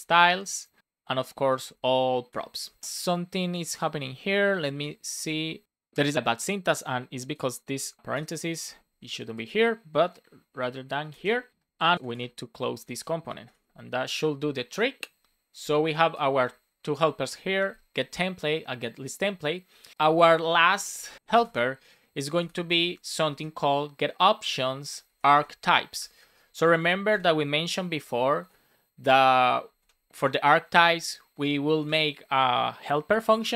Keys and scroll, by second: 0.7 Right, 0.9 shift+9, 2.2 Return, 2.6 super+s, 4.4 Down, 4.7 BackSpace, 7.9 Left, 8.0 BackSpace, 9.1 BackSpace, 10.4 shift+0, 11.0 super+s, 11.9 super+Right, 12.0 space, 12.7 super+s, 13.3 alt+shift+f, 19.9 Return, 21.1 space, 22.7 shift+o, 25.0 shift+a, 25.9 shift+t, 26.7 space, 27.6 shift+9, 29.1 Down, 29.7 space, 30.8 shift+., 31.7 space, 32.8 shift+9, 33.3 shift+[.